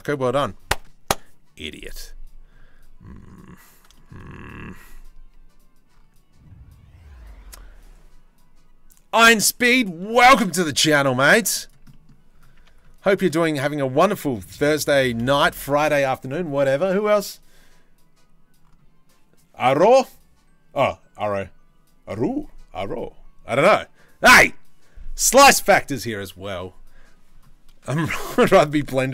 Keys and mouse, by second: 3.6-10.0 shift+middle drag, 10.1 shift+middle click, 11.0 z, 12.3 Tab, 14.9 middle drag, 27.8 shift+middle click.